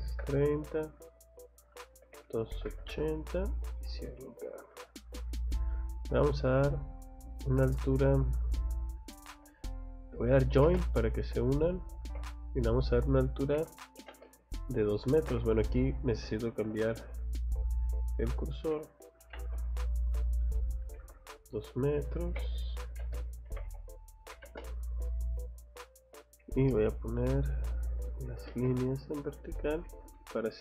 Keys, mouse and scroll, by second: 4.4 click, 5.3 scroll down 2, 5.6 scroll up 2, 6.4 scroll up 2, 7.3 scroll down 2, 7.7 click, 8.0 click, 10.5 j, 10.6 space, 11.1 click, 11.4 click, 12.1 Escape, 12.5 click, 12.7 click, 13.5 c, 14.0 o, 14.1 space, 14.3 click, 15.2 Escape, 16.6 F5, 17.3 click, 17.7 click, 18.7 c, 19.2 o, 19.6 click, 22.3 Escape, 22.7-24.4 typing, 23.5 Escape, 25.3 click, 26.2 click, 26.7 space, 27.3 click, 28.1 click, 28.5 space, 29.0 click, 29.7 click, 29.9 Escape, 30.2 middle click.